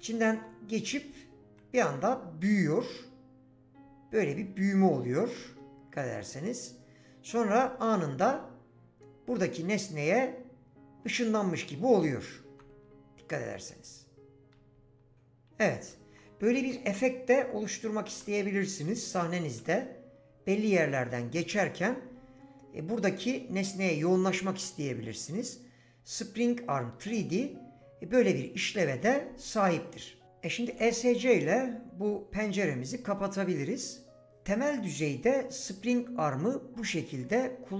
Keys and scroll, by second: 0.0-1.2 typing, 3.0 typing, 11.0-14.3 typing, 15.4-20.0 typing, 22.1 typing, 30.7 Escape.